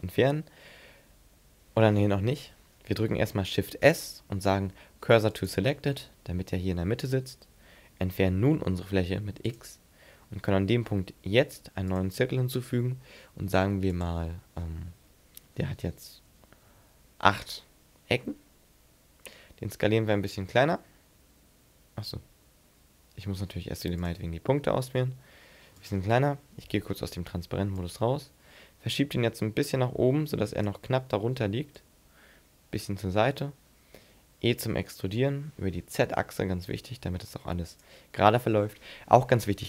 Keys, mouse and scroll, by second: 2.3 ctrl+z, 3.8 shift+s, 8.4 x, 10.9 shift+a, 13.9 click, 19.5 s, 20.9 s, 24.0 click, 24.6 s, 25.9 click, 26.2 z, 26.7 middle click, 27.8 click, 31.8 click, 34.0 e, 37.8 click.